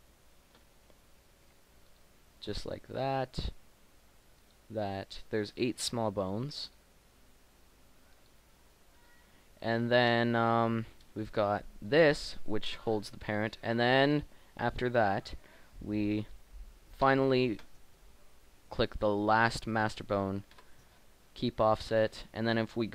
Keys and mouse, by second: 9.8 click, 11.3-12.8 drag, 17.1-18.2 drag, 20.5 ctrl+p, 22.3 Tab.